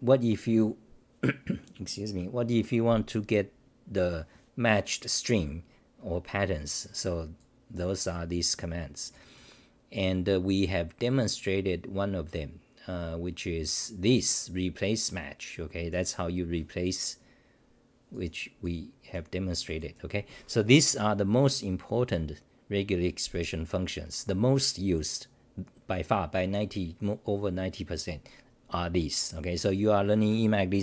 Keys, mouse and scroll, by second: 19.1 click.